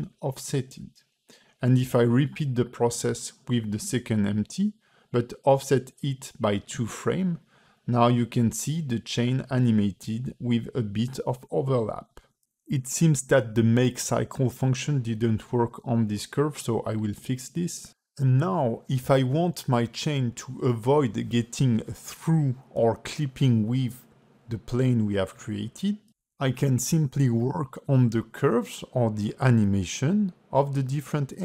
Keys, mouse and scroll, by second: 1.0 t, 2.1 shift+e, 3.2 g, 5.6 space, 6.1 ", 6.6 ", 9.4 space, 10.1 click, 13.1 click, 13.1 scroll down 9, 13.5 a, 14.0 shift+e, 15.3 click, 18.4 space, 20.7 space, 21.5 click, 24.5 g, 27.4 click, 30.5 space.